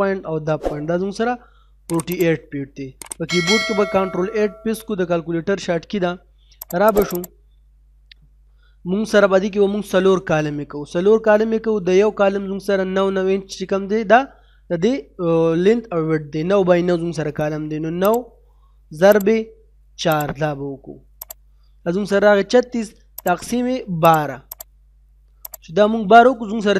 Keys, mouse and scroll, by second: 4.5 ctrl+8, 6.6 click, 9.4 middle click, 18.0 click.